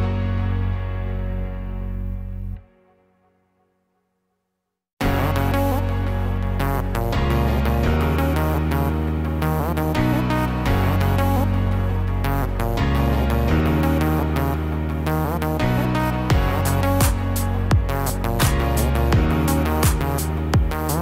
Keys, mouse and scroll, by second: 0.6 click, 1.2 middle click, 2.1 click, 2.8 click, 3.6 click, 4.2 click, 5.5 ctrl+z, 6.7 f, 7.9 click, 9.2 ctrl+z, 9.7 click, 10.2 click, 11.3 middle click, 12.0 scroll up 2, 12.7 click, 13.7 middle click, 14.3-15.1 scroll up 2, 15.7 click, 16.3 click, 17.2 click, 17.6 click, 18.2 click, 18.4 click, 18.9-19.4 scroll down 3, 19.2 middle click, 19.7 middle click, 20.0 scroll up 1, 20.3 scroll down 1, 20.7 middle click.